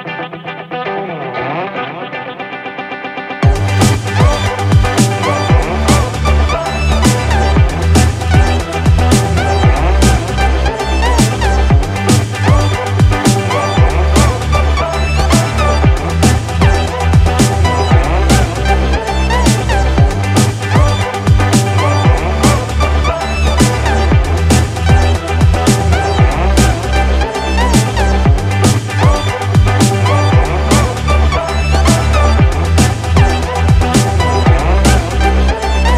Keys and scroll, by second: 17.6 Up, 21.1 Down, 22.4 Up.